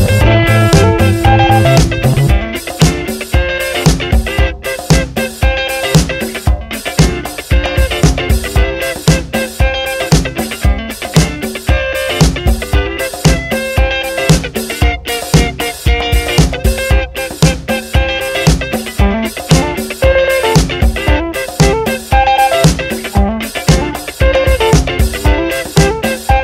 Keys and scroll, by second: 0.1 Down, 0.9 Return, 2.9 F9, 11.4-13.7 typing, 15.5-18.9 typing, 19.3 Return, 20.9-25.5 typing, 25.9 ctrl+Return.